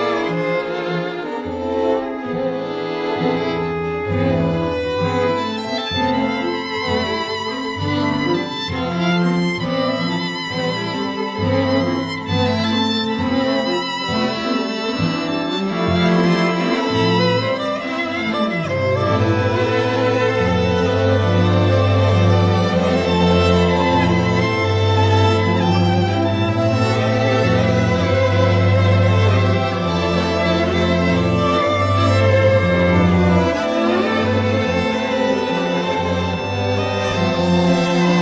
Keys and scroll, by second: 13.9 t.